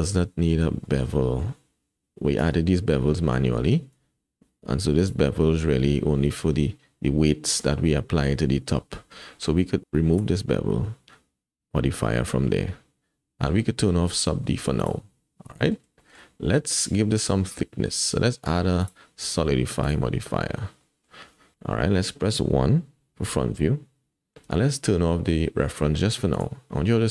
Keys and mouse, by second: 0.9 shift+click, 1.2 drag, 2.4 Tab, 3.5 Tab, 3.8 Tab, 5.0 click, 9.1 Tab, 10.1 click, 12.5-13.5 drag, 14.8 click, 15.6 middle click, 16.1 shift+middle click, 16.4 middle click, 18.8-19.9 drag, 20.8 middle drag, 23.2 KP_1, 24.1 shift+middle drag, 26.3 click, 27.0 shift+middle click.